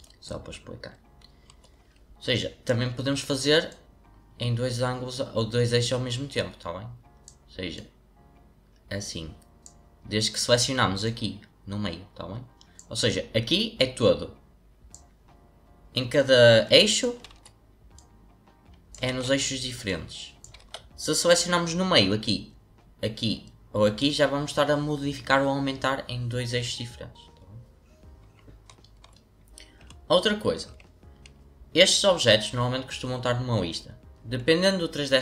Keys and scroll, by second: 17.3 ctrl+z, 19.1 ctrl+z, 20.5 ctrl+z.